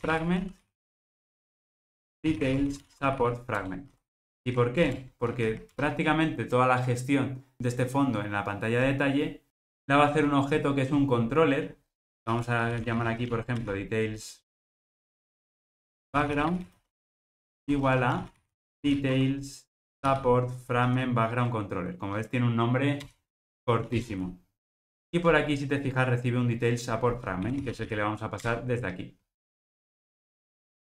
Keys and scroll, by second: 3.6 Return, 23.1 Return, 25.1 super+p, 28.4 super+p, 29.7 Return.